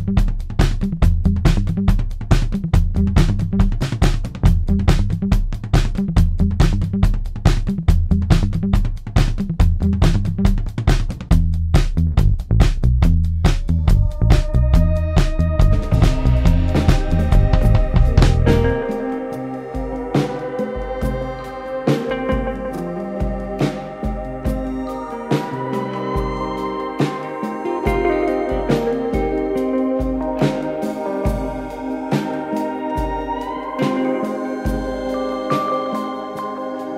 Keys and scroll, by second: 0.3 ], 3.0 ], 4.7 4, 9.3 3, 15.8 4, 19.5 F9, 21.2 2, 22.5 ctrl+d, 22.5 Escape, 23.8 ,, 25.8 ctrl+z, 26.3 ,, 31.3 ].